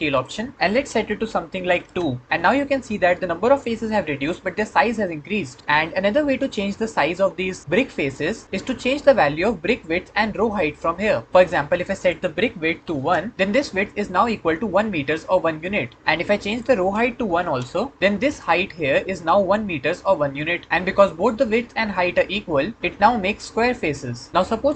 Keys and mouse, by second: 0.1-1.7 drag, 8.6 middle click, 11.3 ctrl+z, 16.3 click.